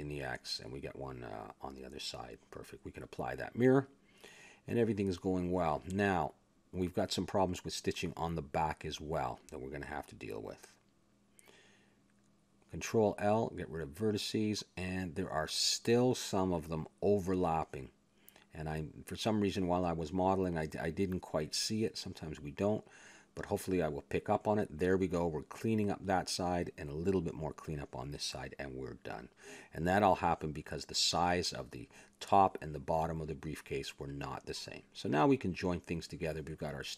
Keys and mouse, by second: 0.1 click, 1.0-2.1 middle drag, 3.7 click, 4.3 a, 4.5 middle click, 6.1 middle click, 7.5 middle click, 8.1-9.2 right drag, 8.5 Tab, 9.7 ctrl+Tab, 10.5-13.9 right drag, 13.6 ctrl+l, 13.9 click, 14.1 x, 15.4 middle click, 15.8-16.9 middle drag, 17.8-19.6 drag, 19.4 a, 19.8-22.2 drag, 22.1 ctrl+l, 22.6 x, 23.4-25.1 drag, 25.1 ctrl+l, 25.6 x, 26.9-28.5 middle drag, 28.5-30.0 drag, 30.6 ctrl+l, 30.6 click, 31.0 x, 31.8 Tab, 32.6 a, 33.7-36.0 drag, 35.6 ctrl+j.